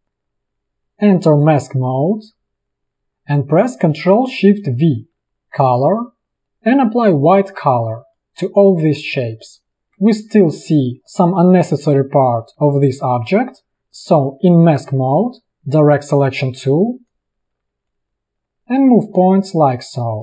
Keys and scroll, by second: 4.8 ctrl+shift+v, 9.7 space, 9.9 a, 10.9 space.